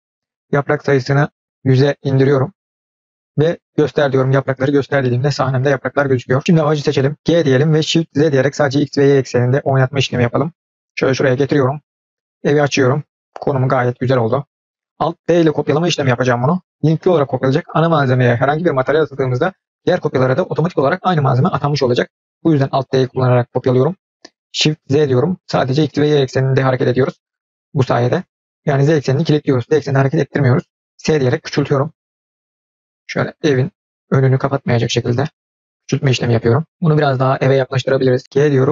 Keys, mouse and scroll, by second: 0.4-1.6 drag, 1.6 KP_0, 4.7 click, 5.5-5.9 scroll up 4, 6.3 scroll down 2, 6.8 click, 7.4 g, 12.5 click, 22.9 alt+d, 29.9 s, 38.2 g, 38.4 shift+z.